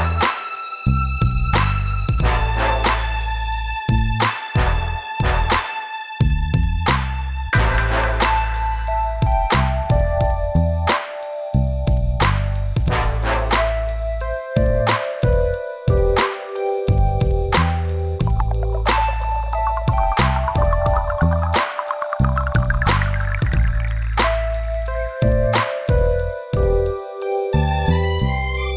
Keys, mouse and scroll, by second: 0.9 click, 2.8 click, 4.1 click, 5.1 click, 5.2 click, 6.2 click, 7.9 click, 9.0 click, 9.1 click, 9.8 click, 9.9 click, 10.7 click, 11.9 click, 14.5 click, 15.0 click, 16.0 click, 17.2 middle click, 18.5 click, 18.6 click, 20.2 scroll up 2, 21.5 click, 22.2 click, 22.9 middle click, 24.2 click, 26.6 click, 27.4 click, 28.3 click.